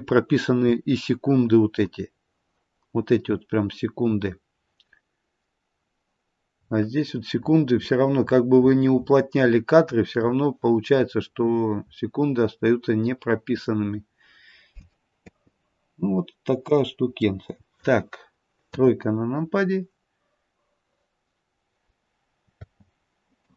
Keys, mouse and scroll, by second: 6.6-7.4 scroll down 3, 7.4-8.3 scroll down 5, 8.3-9.8 scroll down 17, 10.0-12.4 scroll down 18, 12.4-14.1 scroll down 4, 15.2 space, 16.6-17.7 scroll down 1, 17.7 middle click, 18.7 KP_3, 19.4-20.5 scroll up 1, 23.3 click, 23.3 space.